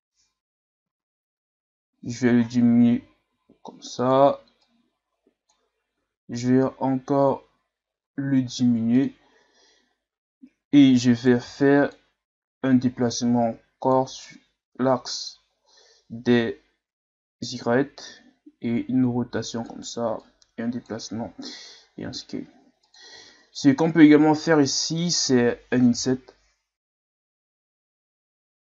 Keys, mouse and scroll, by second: 3.3 s, 4.6-5.9 drag, 5.9 s, 11.2 right click, 11.5 b, 12.8-15.8 drag, 18.1 r, 20.2-21.4 drag, 21.4 s, 23.1 z, 23.6-26.0 middle drag, 26.0 i.